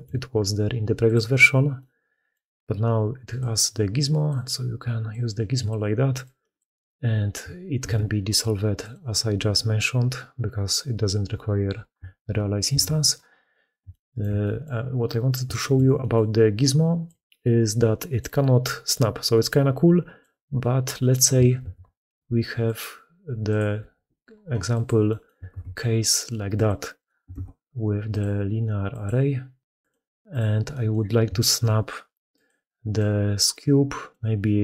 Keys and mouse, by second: 1.1-1.6 middle drag, 2.2-3.3 middle drag, 4.1-5.0 middle drag, 5.5-6.1 middle drag, 6.4-10.8 middle drag, 7.7 ctrl+x, 12.6 ctrl+z, 13.7-14.0 shift+drag, 14.3 click, 15.4-16.0 shift+drag, 17.0-18.0 drag, 18.6 middle click, 19.3 middle click, 21.5 shift+a, 23.6 g, 25.3 shift+d, 27.2 ctrl+x, 30.5 click, 31.3 shift+middle drag, 31.7 g, 32.8-33.9 drag, 34.5-34.6 d.